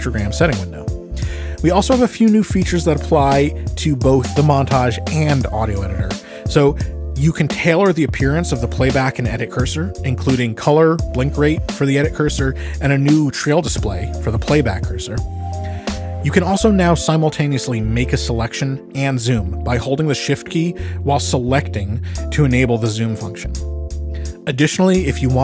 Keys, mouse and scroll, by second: 1.2 click, 7.2 ctrl+,, 14.8 click, 15.6-16.7 drag, 16.7 click, 19.0-25.4 drag.